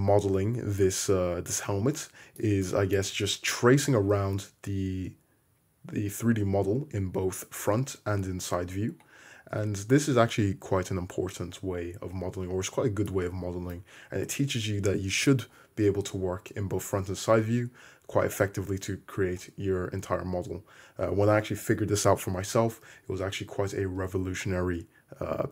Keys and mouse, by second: 3.2 `, 8.0 `, 9.5 `.